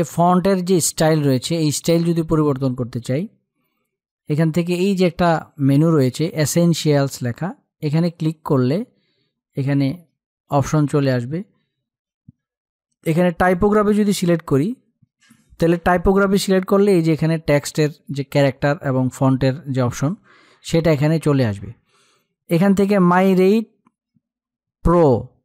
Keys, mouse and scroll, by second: 7.5 click, 12.9 click, 25.0 click.